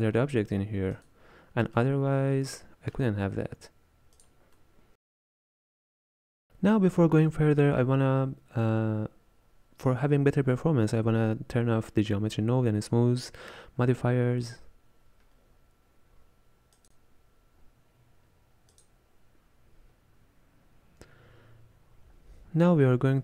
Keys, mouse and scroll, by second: 1.0 click, 1.8-4.3 middle drag, 4.3 click, 4.6-17.5 middle drag, 18.8-19.1 drag.